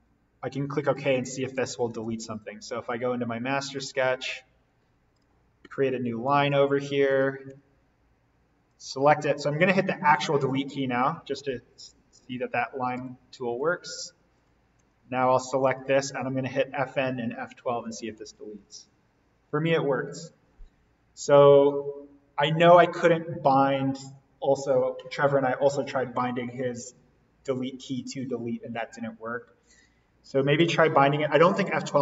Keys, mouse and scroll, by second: 0.9 click, 2.8 right click, 3.6 click, 5.6 l, 7.4 Escape, 8.6 click, 10.7 Delete, 13.2 l, 13.6 click, 14.8 Escape, 15.6 click, 18.5 F12, 30.6 l, 31.3 click.